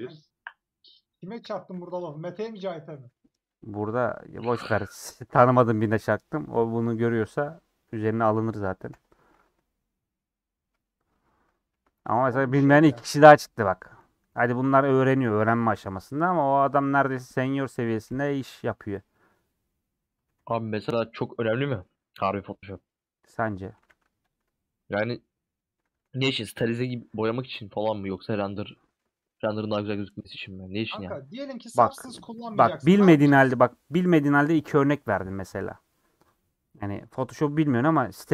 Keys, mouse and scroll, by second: 1.5 w, 9.1 ;, 11.1 middle click, 11.6-12.0 scroll down 3, 11.7 alt+z, 12.0-13.7 middle drag, 13.7 scroll up 1, 13.9 4, 14.5-15.8 alt+drag, 15.8 ;, 16.1-17.5 middle drag, 17.5 3, 19.1-20.3 middle drag, 20.3 ctrl+r, 21.3-22.4 middle drag, 22.4 click, 22.9 middle click, 23.9 a, 24.7-25.9 middle drag, 25.9 2, 26.7-27.8 middle drag, 27.8 alt+click, 28.5 middle click, 29.1-29.5 scroll up 2, 30.3 alt+shift+click, 31.3 alt+shift+click, 32.6-34.9 middle drag, 35.0 scroll down 2, 35.2-37.6 middle drag, 37.6-38.0 scroll up 2.